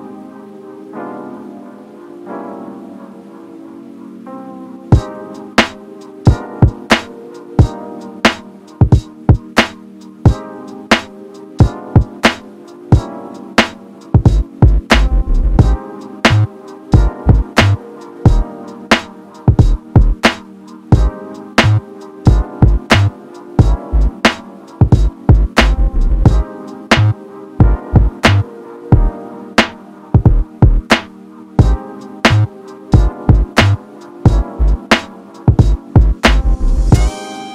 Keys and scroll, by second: 24.4 ctrl+t.